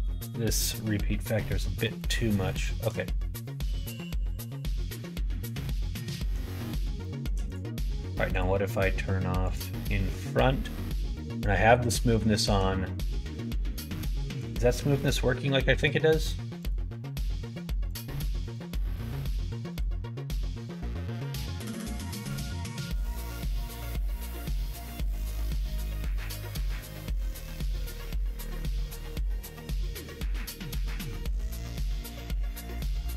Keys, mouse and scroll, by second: 1.8 middle click, 2.6 shift+middle click, 3.4-6.0 middle drag, 6.9 shift+middle click, 9.4 click, 10.4 middle click, 11.1 middle click, 11.7 middle click, 12.3 shift+middle click, 14.3 click, 15.7 click, 16.5 click, 17.8 click, 18.4 click, 18.8 click, 19.3 click, 19.6 click, 20.2 click, 20.6 click, 22.9-24.0 drag, 26.2 click, 26.7 click, 27.2 click, 27.7 click, 28.3 click, 30.6 click, 31.8 click, 32.2 click, 32.7 middle click.